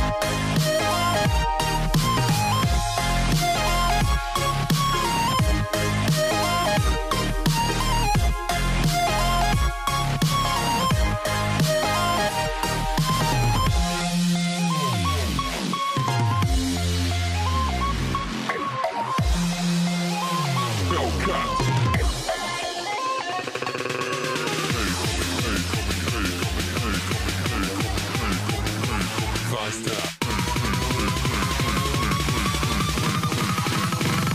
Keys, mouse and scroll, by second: 6.5 ctrl+r, 16.8 ctrl+r, 25.3 ctrl+r, 31.3 alt+z, 32.0 click.